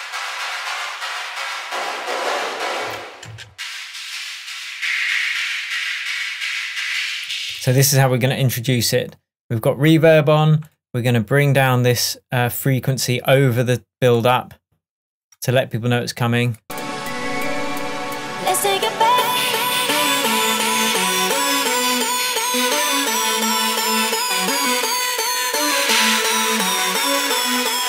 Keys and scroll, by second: 2.9 space, 7.4 space.